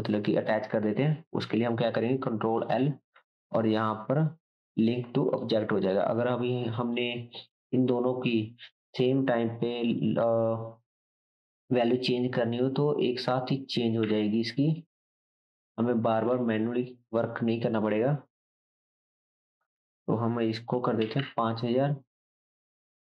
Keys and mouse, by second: 2.6 ctrl+l, 5.9-6.8 drag, 6.9-8.6 drag, 16.3-18.5 drag.